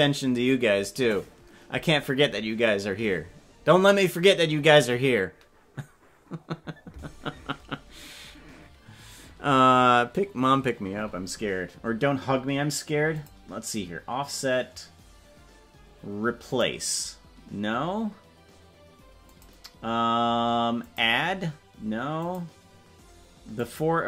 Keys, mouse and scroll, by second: 13.1-16.7 drag, 19.2-21.0 drag, 22.2-23.8 drag.